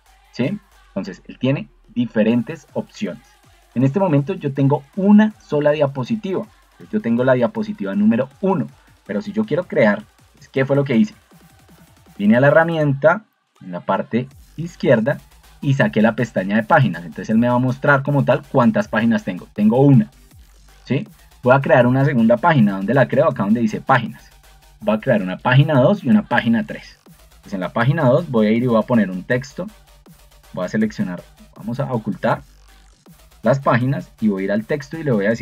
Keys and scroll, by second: 11.8 ctrl+2, 16.4 Escape, 22.5 ctrl+2, 24.6 Escape.